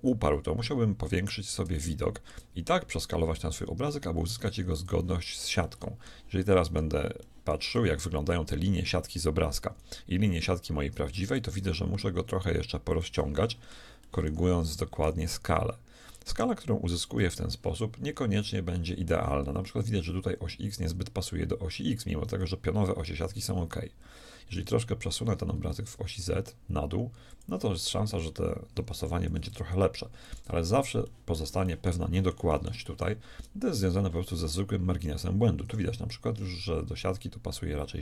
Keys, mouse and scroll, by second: 3.0 middle click, 3.6 s, 5.6 middle click, 11.4 s, 13.4-15.6 shift+middle drag, 15.1 s, 25.2 g, 29.0 g, 32.7-34.4 drag, 34.4-38.0 middle drag.